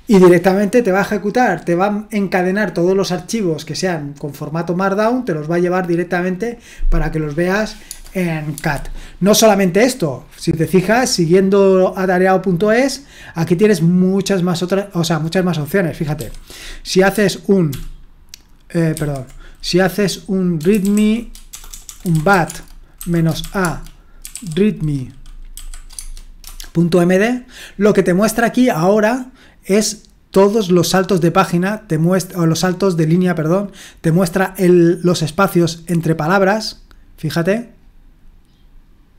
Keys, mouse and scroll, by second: 0.4 typing, 7.9 space, 8.5 space, 15.8 click, 16.2 q, 17.7 ctrl+p, 18.9 ctrl+c, 20.5-25.6 typing, 26.0 Tab, 26.4 Return, 35.2 click.